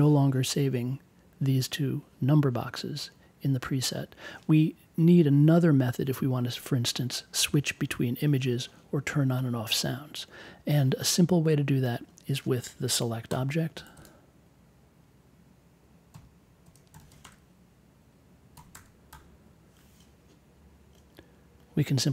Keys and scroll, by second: 13.2 n, 16.1 l, 16.6 e, 17.1 t, 17.2 space, 18.5 1, 18.7 space, 19.1 2.